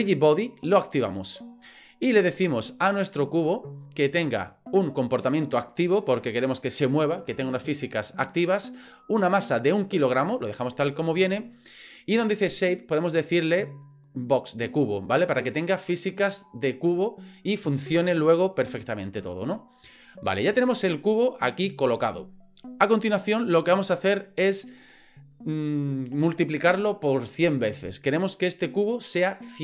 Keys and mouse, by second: 0.8 click, 13.1-14.4 drag.